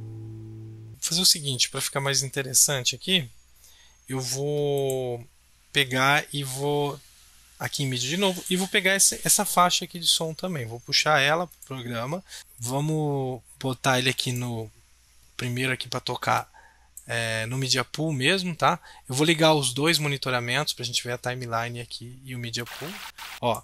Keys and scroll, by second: 12.4 BackSpace.